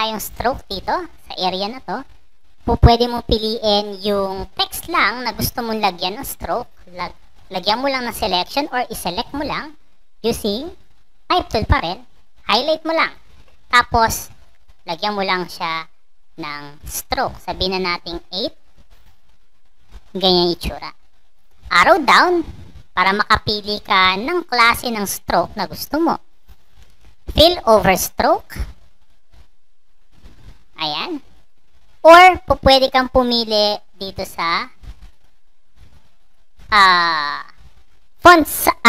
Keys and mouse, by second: 2.2 click, 2.7 click, 2.9 click, 3.4 click, 4.1 click, 4.7-5.7 drag, 6.4 click, 7.0-8.4 drag, 9.4-10.7 drag, 12.2 click, 14.4 click, 16.1 click, 17.9 click, 21.8 click, 23.1 click, 24.7 click, 27.9 click, 28.9 click, 31.3 click, 32.6 click, 33.1 click, 33.3 click, 33.5 click, 34.3 click, 35.1 click, 35.7 click, 36.2 click, 36.5 click.